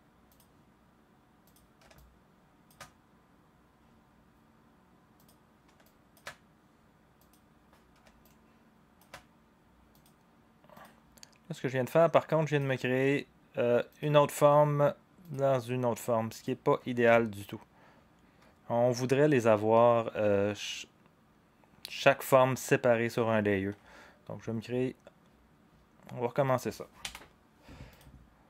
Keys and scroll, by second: 27.0 Delete.